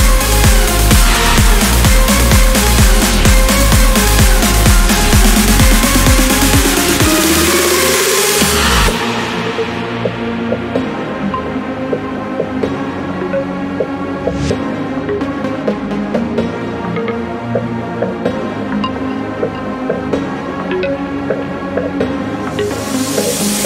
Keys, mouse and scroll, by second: 0.9 ctrl+click, 1.7-2.3 ctrl+scroll down 2, 2.3 ctrl+click, 5.1 ctrl+click, 6.1-6.4 ctrl+scroll up 1, 6.7 ctrl+scroll down 1, 7.2 ctrl+click, 8.1 ctrl+scroll down 1, 8.7-9.0 ctrl+scroll up 1, 10.2 ctrl+click, 11.7 ctrl+click, 12.5-12.9 scroll down 1, 13.1 click, 15.5 click, 19.3 ctrl+click, 20.4 ctrl+click, 21.0 ctrl+click, 21.5-22.0 scroll down 1, 22.5-22.9 scroll up 1.